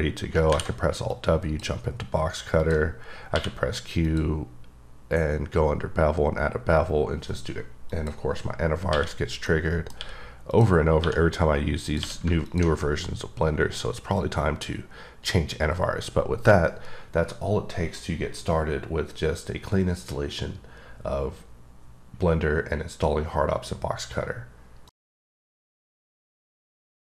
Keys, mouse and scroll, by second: 0.5 w, 1.1 click, 2.6 click, 3.3 q, 4.0 click, 7.9 click, 8.9 q, 9.5 middle click, 10.0 q, 10.5 click, 11.0 1, 11.9 click, 12.0 q, 12.4 alt+click.